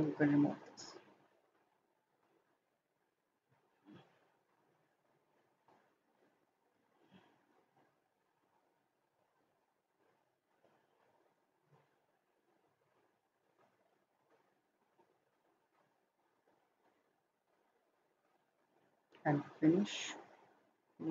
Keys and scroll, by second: 0.2 Delete.